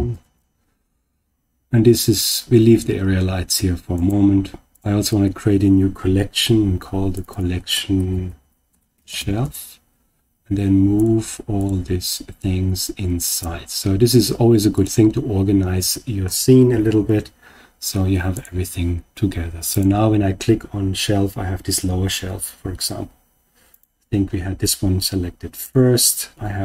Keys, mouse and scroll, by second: 3.9 click, 3.9 right click, 7.1 click, 7.3-9.4 drag, 10.9 click, 11.5 shift+click, 12.3 click, 14.7 click, 18.3 click, 19.6 click, 23.6 click, 25.5 click.